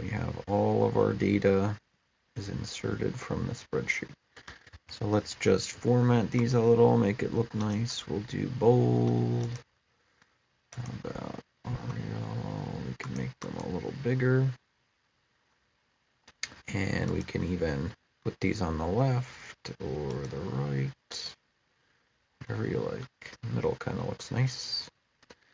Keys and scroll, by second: 4.5 ctrl+a.